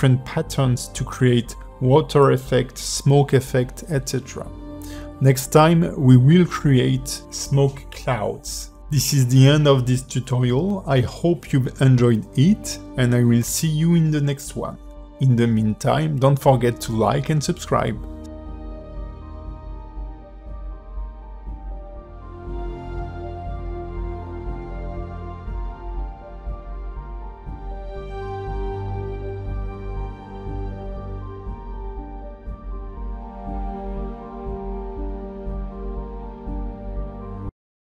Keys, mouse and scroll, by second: 0.4 scroll down 4, 0.6 shift+middle click, 1.3 click, 2.0 shift+middle click, 2.5 click, 3.5 shift+middle click, 3.8-4.7 scroll up 4, 4.2 click, 4.8 click, 6.6 click, 8.0 middle click, 8.2-8.6 scroll up 6, 8.6 middle click, 8.7-9.1 scroll down 3.